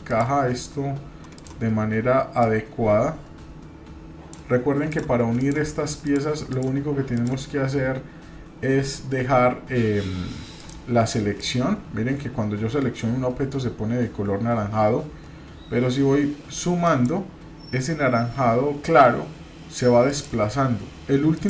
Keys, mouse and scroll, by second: 0.1 shift+click, 1.3 shift+click, 2.4-4.3 drag, 4.9 drag, 5.4 click, 6.0-6.9 shift+drag, 10.5 click, 11.4 click, 16.8-18.9 shift+drag, 20.1-21.4 shift+drag.